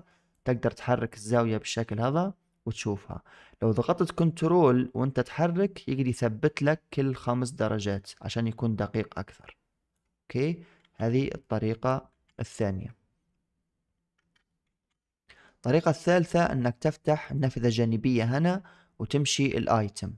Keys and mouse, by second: 0.3-9.8 drag, 10.7 ctrl+z, 11.3 middle drag, 12.0 ctrl+z, 12.4 ctrl+z, 14.6 ctrl+shift+z, 15.1 middle click, 17.1 click.